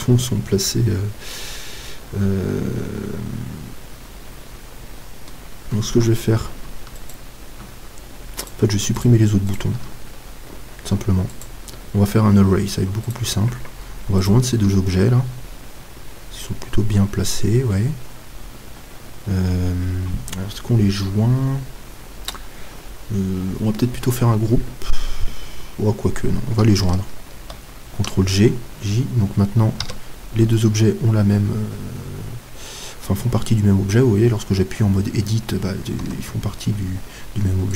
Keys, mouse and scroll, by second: 7.0-16.0 right drag, 10.8 x, 15.2-27.3 middle drag, 17.6-27.3 scroll down 1, 27.3 ctrl+j, 29.8 Tab, 30.6-32.3 middle drag, 36.0 Tab.